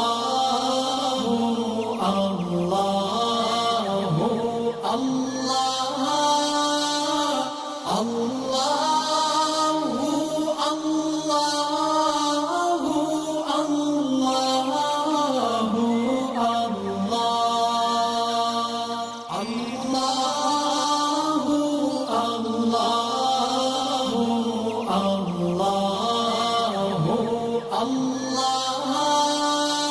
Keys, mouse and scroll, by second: 0.2 alt+scroll up 1, 0.7-1.2 click, 2.8 ctrl+shift+[, 3.6 click, 4.6 ctrl+shift+[, 5.6 click, 6.0 alt+scroll down 1, 6.4 alt+scroll up 1, 6.8-8.3 drag, 12.6 alt+scroll down 1, 12.9 space, 12.9 click, 19.1-19.7 click, 20.6 alt+scroll up 1, 21.0 space, 21.1 click, 21.5 alt+scroll down 1, 21.7 space, 21.7 click, 22.1 alt+scroll up 1, 23.3 alt+scroll down 1, 23.5 space, 23.6 click, 24.4-25.8 alt+drag, 26.0 right click, 26.8 click, 29.2 alt+scroll up 1, 29.7-29.9 drag.